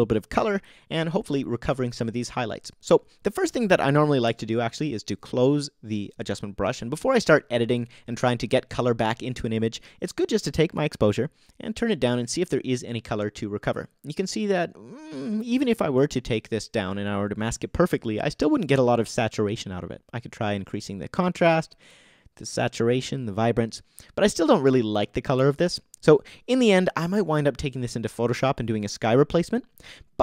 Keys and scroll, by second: 4.2 Return.